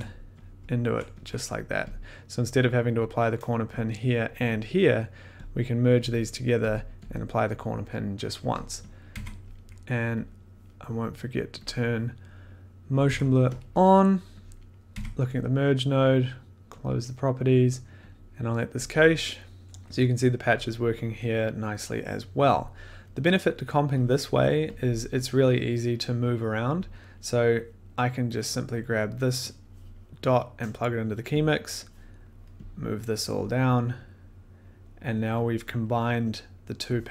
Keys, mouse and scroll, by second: 0.8 ctrl+click, 1.5 click, 2.0 click, 2.0 middle click, 4.1 click, 4.8 click, 5.2-5.5 scroll, 5.5 click, 6.3 click, 6.7 click, 7.1 middle click, 7.4 click, 8.6 click, 9.0 click, 9.1 1, 9.4 click, 10.0 click, 10.1 click, 10.2 click, 10.3 click, 11.8 click, 13.0 click, 13.0 1, 13.5 click, 14.5 click, 14.9 1, 16.8 click, 18.0 click, 23.2 middle click, 24.3 click, 24.7 click, 25.5 click, 26.9 click, 26.9 middle click, 27.3 middle click, 30.9 click, 31.4 click, 31.4 middle click, 32.2 click, 32.7 click, 32.7 middle click, 33.6 scroll, 34.5 click, 35.5 click.